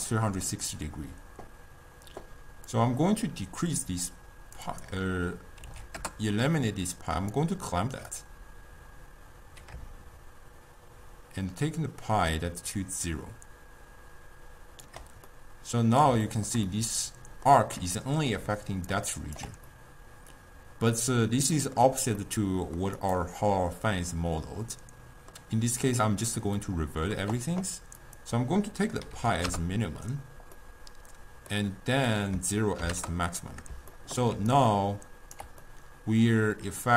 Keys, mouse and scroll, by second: 2.7-7.3 drag, 8.2-11.2 drag, 15.3-18.5 middle drag, 18.5 d, 18.7 click, 19.1 d, 19.2 click, 19.4 d, 19.7-23.0 middle drag, 23.0 click, 23.5-26.5 middle drag, 26.6-28.0 middle drag, 28.0-30.6 drag, 30.6-32.2 middle drag, 32.2-33.5 drag, 33.5-34.4 middle drag, 34.4 d, 34.7-35.7 right drag, 35.7-36.9 middle drag.